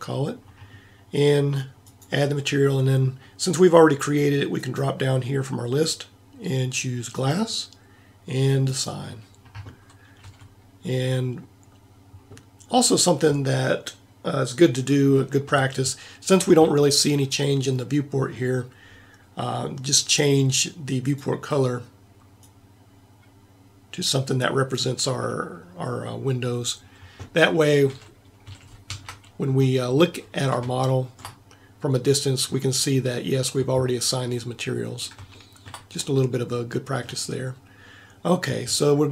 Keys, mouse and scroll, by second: 10.2 a, 23.1-26.9 middle drag, 27.5 middle click, 27.9 a, 28.5 a, 29.0 Tab, 36.2-39.0 middle drag.